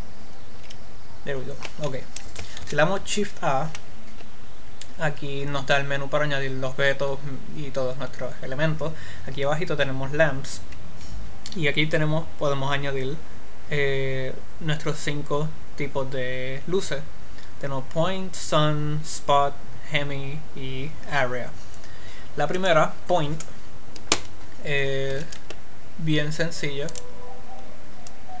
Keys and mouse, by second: 0.9 n, 2.9 shift+a, 25.5 a, 26.0-28.4 middle drag.